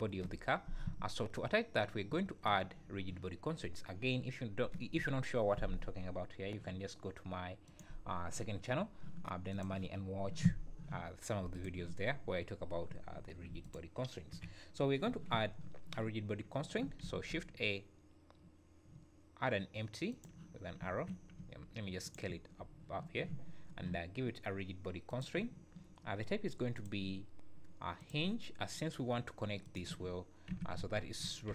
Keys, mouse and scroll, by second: 1.4 scroll up 3, 2.0 `, 13.6 click, 14.3 KP_1, 17.0 shift+a, 20.6 scroll down 3, 21.4 s, 25.1 click, 26.7 click, 30.5 r.